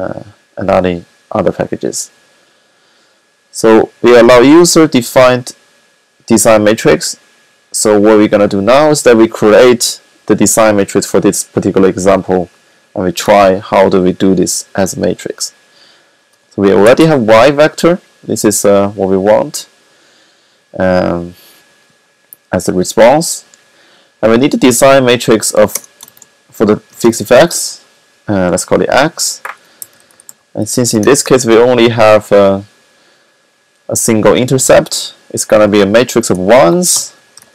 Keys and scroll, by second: 16.0 y, 24.9 x, 26.9-27.7 typing, 29.3-31.3 typing, 34.8 Left, 37.2-37.5 typing.